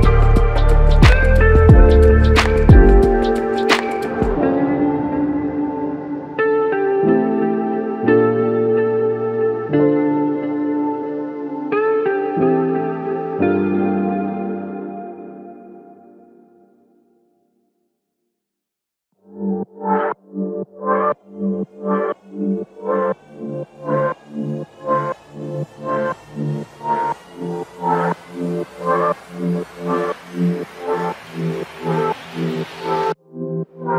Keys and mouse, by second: 2.3 double click.